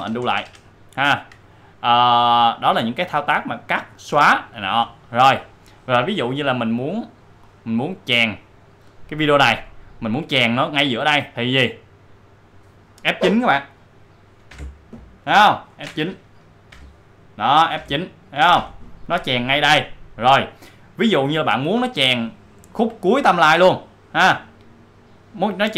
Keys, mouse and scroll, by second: 7.5-9.1 drag, 12.2 click, 14.4 F9, 16.7 F9, 17.7 F9, 18.5 F9, 24.2-25.7 drag.